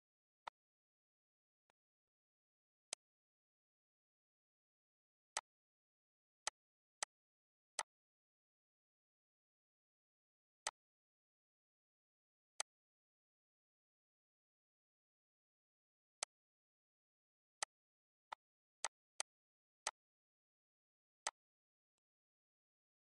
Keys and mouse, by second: 0.2 click, 1.4 click, 2.7 click, 4.4 ctrl+z, 5.1 click, 6.2 click, 6.8 click, 7.5 click, 10.4 click, 12.4 click, 16.0 click, 17.4 shift+click, 18.1 shift+click, 19.6 click, 21.0 click, 21.7 click.